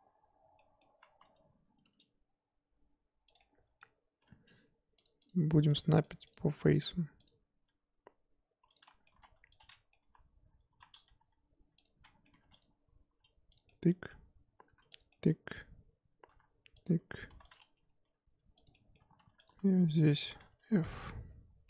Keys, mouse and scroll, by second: 0.0 z, 0.5-0.9 middle drag, 0.9 z, 3.4-6.2 middle drag, 6.2 click, 7.6 g, 8.8 middle drag, 9.1 1, 9.6 click, 9.7 middle click, 10.0 z, 10.7 z, 11.1 g, 12.0 middle drag, 12.3 2, 12.6 click, 13.1 e, 13.6-14.7 middle drag, 14.7 e, 15.1-16.3 middle drag, 16.3 e, 17.5 click, 18.0 g, 18.7-19.2 middle drag, 19.2 2, 19.4 click, 20.1 shift+click, 20.5 f, 20.9 scroll down 2, 21.0-21.6 middle drag.